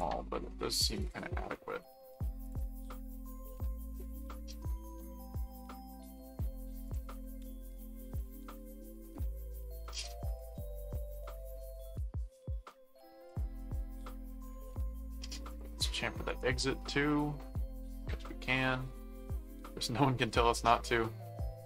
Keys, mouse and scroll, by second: 1.0 click, 2.4 click, 6.9 click, 8.4 click, 10.3 click, 11.7 click, 13.2 click, 14.4 click, 15.5 click, 16.3 right click, 17.1-19.9 middle drag, 21.2 middle click.